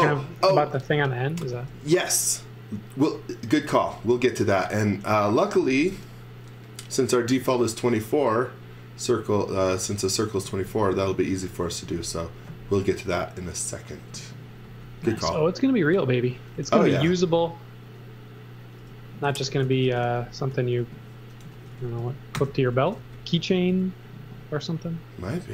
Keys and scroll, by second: 0.6 x, 1.7 v, 3.4 x, 3.7 v, 11.1 z, 11.7 x, 12.0 v, 13.0 v, 14.1 x, 14.6 v, 16.6 x, 17.1 z, 18.1-23.5 typing, 24.5 space.